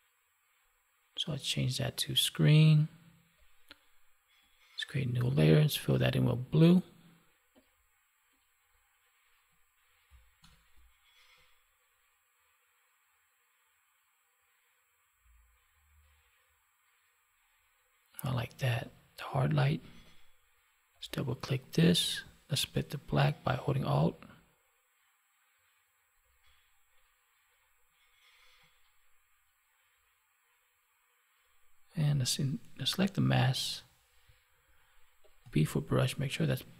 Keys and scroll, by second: 10.3 alt+BackSpace.